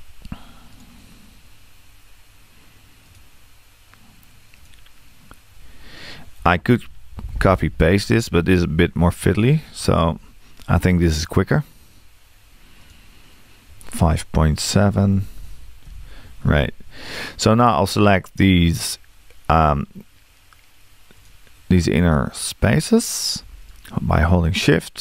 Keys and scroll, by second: 6.4 5, 14.9 5.